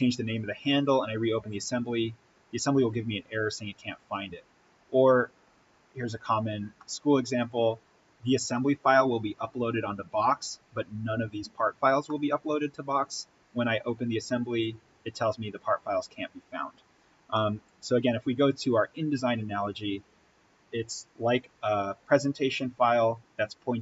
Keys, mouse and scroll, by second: 5.6-6.7 scroll down 1, 6.7-9.9 middle drag, 11.9 scroll up 1, 12.0-17.2 middle drag, 17.2 middle click, 18.4 click.